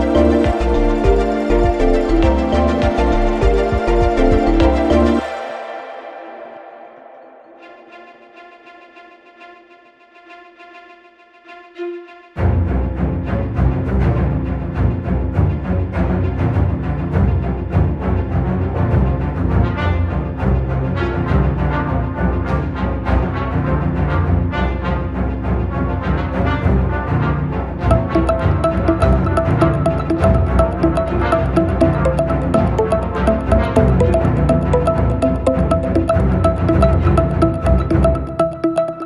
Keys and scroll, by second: 2.1 ctrl+z, 5.3 Delete, 6.1 Delete, 10.0 ,, 15.2 ctrl+z, 18.1 ..